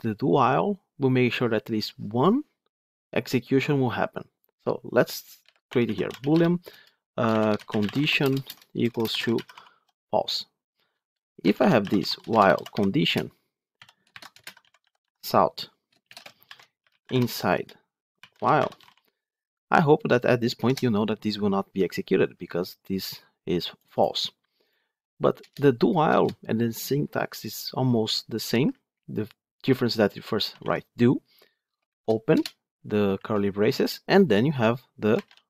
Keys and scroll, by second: 13.0 Return, 15.0 Tab, 20.5 ctrl+shift+F10.